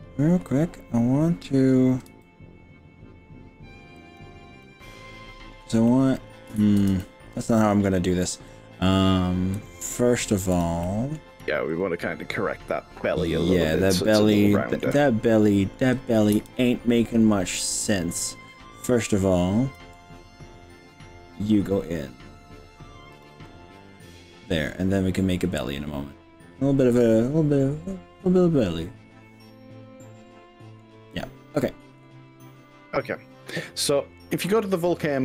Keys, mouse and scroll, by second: 2.1 s, 4.1 click, 4.6-5.7 middle drag, 5.9 middle click, 6.7 ctrl+z, 7.0-8.9 middle drag, 9.7 click, 10.5 drag, 10.9-11.3 middle drag, 11.7 drag, 12.0-13.1 middle drag, 13.7-14.9 middle drag, 16.3 KP_3, 17.5-18.3 scroll up 4, 18.4 scroll down 3, 18.9-19.5 scroll up 3, 19.9 g, 23.1 click, 23.5 middle click, 24.3-24.7 scroll down 4, 25.3 scroll down 1, 25.4-30.6 middle drag, 30.6 click.